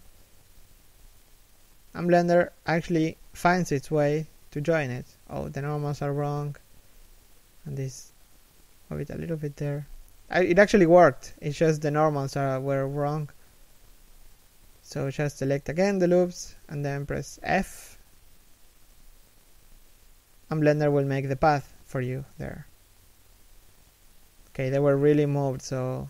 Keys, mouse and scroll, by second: 1.3 f, 4.3 z, 6.1 right click, 7.2 l, 7.7 g, 9.6 a, 11.4 ctrl+n, 12.3 z, 13.4 a, 13.8 alt+right click, 14.8 alt+shift+right click, 15.3 z, 18.5-19.1 scroll down 1, 19.1 f, 22.8 right click, 23.0 g, 23.8 right click, 24.9 g.